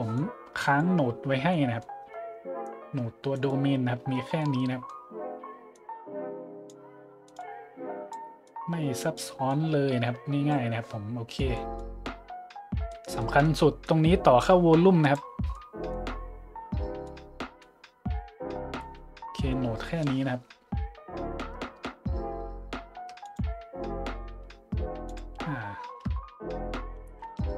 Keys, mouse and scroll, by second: 0.1 click, 1.0 middle click, 1.2 middle click, 1.5 middle click, 2.0 middle click, 3.3 right click, 3.9 middle click, 4.3 middle click, 4.4 middle click, 5.0 middle drag, 5.7 click, 7.2-8.1 drag, 8.5 click, 9.4-10.5 drag, 11.0 middle click, 11.0 scroll up 1, 13.8-15.1 drag, 15.5 middle click, 17.0 middle click, 23.2 click, 25.1 click, 27.0 click, 27.4-27.5 shift+drag.